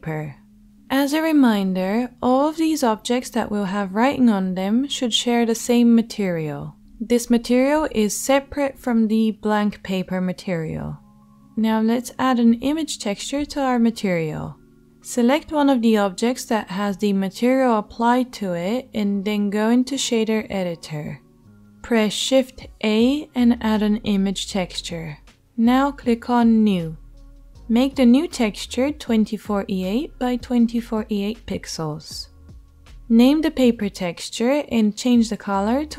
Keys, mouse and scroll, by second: 10.6 Tab, 11.4 click, 12.4 shift+click, 13.0 shift+click, 14.2-26.1 shift+drag, 20.2 shift+a.